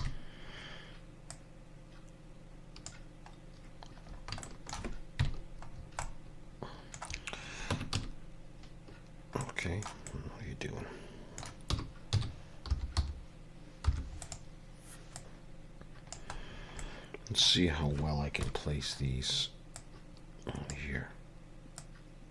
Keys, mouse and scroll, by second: 0.0 KP_3, 1.3 click, 4.1 scroll up 2, 4.5 shift+middle click, 5.2 KP_Decimal, 5.7 scroll down 4, 6.1 middle click, 7.8 Tab, 8.0 a, 8.0 q, 10.1 middle click, 11.7 r, 15.2 click, 16.5 scroll down 4, 16.8 middle click, 18.4 KP_1, 19.1 scroll down 2, 19.8 click, 21.8 click.